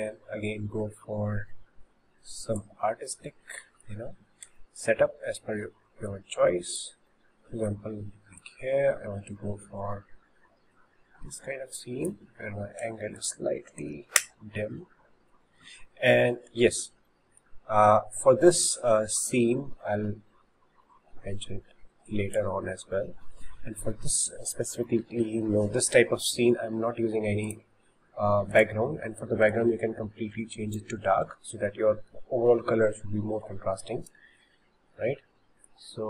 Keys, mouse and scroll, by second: 3.2-6.1 middle drag, 6.1 click, 6.2 middle click, 7.1-8.4 middle drag, 8.4 click, 13.2-16.5 drag, 16.8-18.6 shift+middle drag, 18.6 click, 18.6 click, 27.5 click, 28.5 click, 29.6 click.